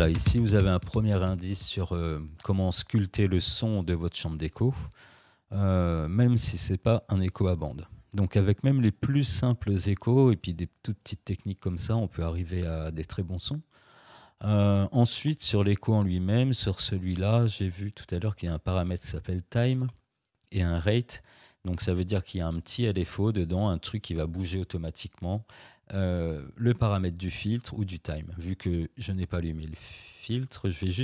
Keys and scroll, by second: 0.1 space.